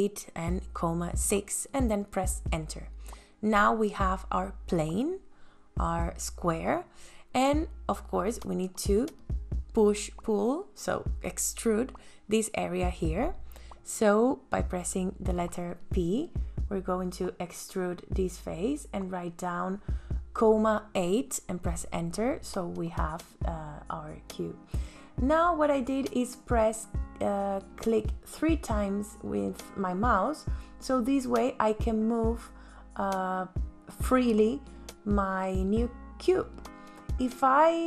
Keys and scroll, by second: 1.0 ,, 1.2 KP_6, 1.5 KP_Enter, 3.3 space, 10.4 p, 16.0 ,, 16.5 KP_Enter, 18.8 space, 25.8 m.